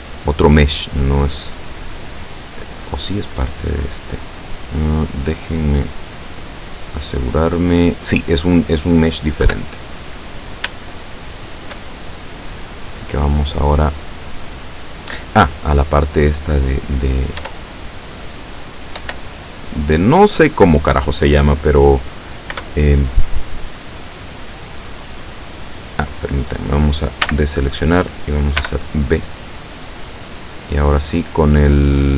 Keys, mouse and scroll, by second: 1.6 right click, 2.6-4.5 middle drag, 4.7 middle click, 5.4 scroll down 2, 5.7 middle click, 6.5-8.8 middle drag, 9.5 KP_7, 10.3-10.7 scroll up 2, 10.9-11.9 shift+middle drag, 17.4 Tab, 18.0 right click, 19.0 Tab, 22.6 o, 25.2 click, 27.4 a, 28.7 b, 29.4 click, 30.9-32.1 drag.